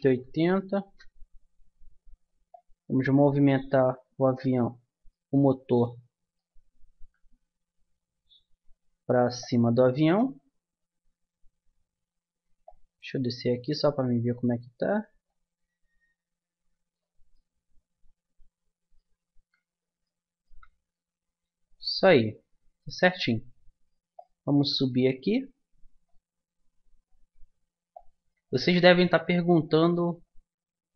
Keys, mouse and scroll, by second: 2.5-4.4 drag, 5.2-7.0 middle drag, 7.0 KP_3, 9.4-11.2 drag, 12.6-14.4 drag, 15.2-17.1 drag, 17.3-18.8 drag, 19.2-22.4 middle drag, 24.1-26.0 drag, 26.4 middle click, 27.9-30.2 drag.